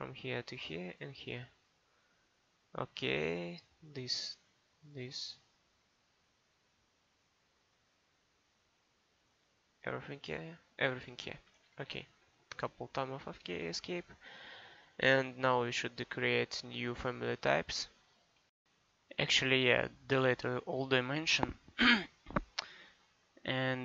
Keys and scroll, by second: 11.3 Escape.